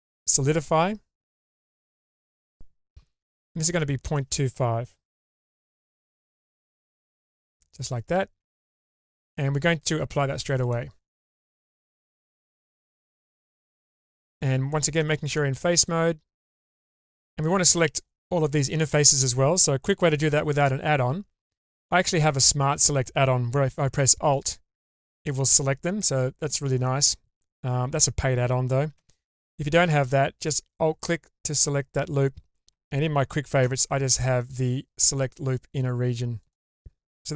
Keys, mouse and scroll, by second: 4.1-5.9 drag, 6.9 scroll down 2, 7.3-7.9 middle drag, 8.1-8.5 scroll up 1, 8.5 Tab, 9.0 click, 9.7-10.7 drag, 11.7 Tab, 12.7-13.4 middle drag, 13.9 3, 14.3-14.9 scroll up 2, 14.7 middle click, 15.8 ctrl+alt+click, 24.3 alt+click, 29.0 2, 30.3 alt+click, 32.7 right click, 33.6 q.